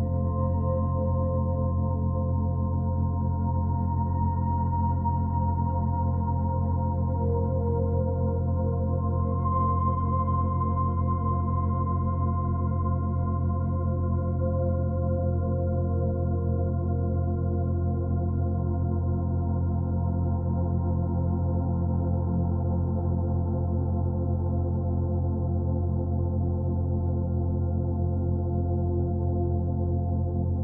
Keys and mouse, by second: 0.7 click, 4.4-5.2 drag, 6.9-12.2 shift+drag, 12.5-15.1 ctrl+alt+drag, 15.8-19.9 alt+drag, 20.4-23.4 alt+drag, 23.6-27.9 drag.